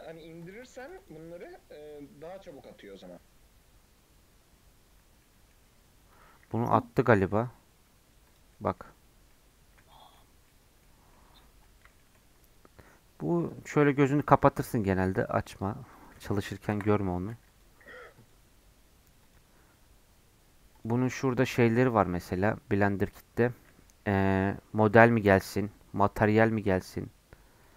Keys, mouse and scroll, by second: 5.7 scroll down 1, 6.1 click, 6.5 z, 8.3 click, 8.5-9.3 scroll up 6, 9.3 middle click, 10.2 scroll down 5, 10.5 middle click, 11.0 scroll down 2, 11.1 middle click, 11.4 scroll up 2, 11.6-13.5 middle drag, 13.5-27.7 drag.